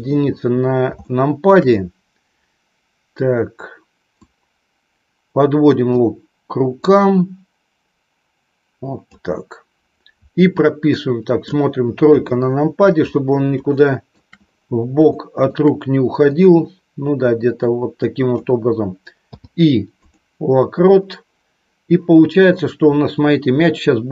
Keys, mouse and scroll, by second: 1.0 shift+middle click, 4.1-6.0 drag, 6.6-9.0 drag, 10.9 middle click, 11.3 scroll down 1, 11.9 KP_3, 13.6 shift+middle click, 15.0 shift+middle click, 16.3-18.4 drag, 23.4-24.1 shift+middle drag.